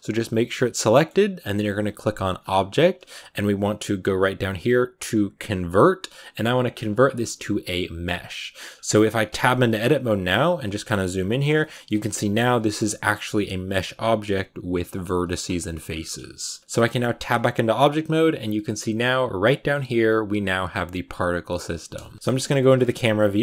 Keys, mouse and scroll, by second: 0.6 scroll up 1, 0.7-8.0 middle drag, 8.4 shift+middle click, 8.6-9.3 scroll up 3, 9.2 Tab, 9.3 middle click, 10.0 a, 10.9-12.0 ctrl+middle drag, 12.0 1, 12.6 right click, 12.8 g, 15.8-16.2 scroll down 4, 16.2 shift+middle click, 17.1 Tab, 21.8 KP_0, 22.2 a, 22.5 shift+middle click, 22.6-23.4 scroll up 4.